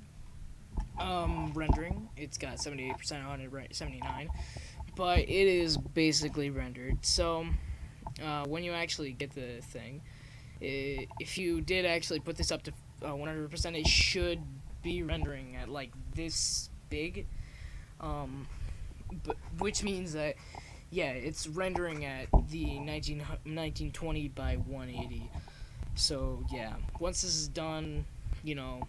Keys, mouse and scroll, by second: 1.4-9.2 middle drag, 14.1-16.4 drag.